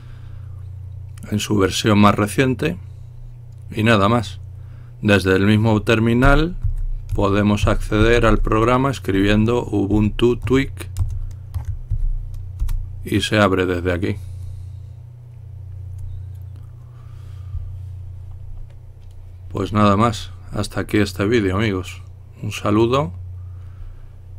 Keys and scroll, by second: 6.3-12.0 typing, 12.7 Return, 13.7 typing.